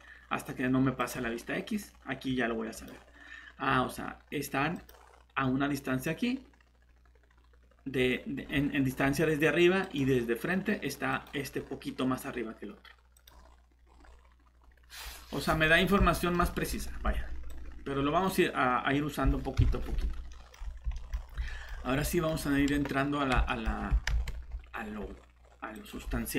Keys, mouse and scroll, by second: 1.0 click, 8.4 scroll down 1, 8.9 scroll up 1, 9.8 click, 13.8 scroll up 1, 15.0 scroll down 1, 15.7 middle click, 17.5 click, 19.6 shift+Delete, 20.3 middle click, 20.4 typing, 21.1 scroll up 1, 21.5 middle click, 21.7 scroll up 1, 22.1 middle click, 22.4 scroll up 1, 23.5 middle click, 24.1 ctrl+shift+z, 24.7 scroll down 1, 25.3 scroll up 1, 25.7 click.